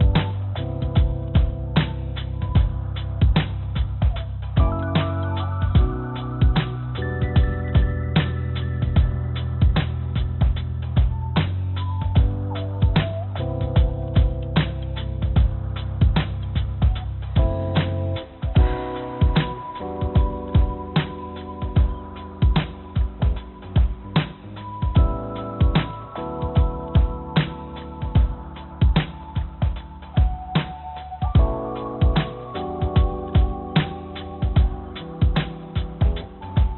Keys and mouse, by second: 1.0 shift+click, 1.7 shift+click, 1.9 shift+click, 3.2 shift+click, 3.7 shift+click, 4.7 shift+click, 5.5-7.0 shift+drag, 8.7 shift+click, 9.9 shift+click, 10.3-11.7 shift+drag, 13.3-14.4 shift+drag, 16.2 click, 17.5 click, 18.1-20.6 drag, 21.5 shift+click, 22.2 click, 24.3 shift+click, 25.3 click, 27.2 click, 28.6 click, 29.5 click, 30.3 click, 30.3 click, 31.7 click, 32.7 click, 34.5 click, 35.8 click.